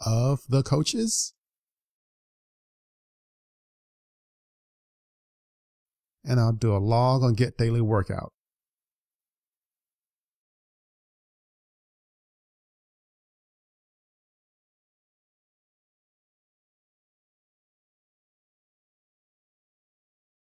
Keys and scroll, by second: 12.9 super+s.